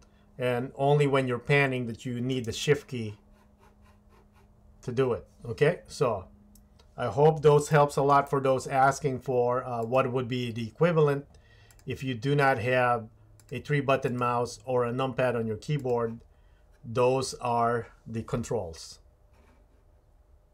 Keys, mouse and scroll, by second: 7.7-8.1 shift+middle drag, 8.3 middle click, 9.9-12.1 drag.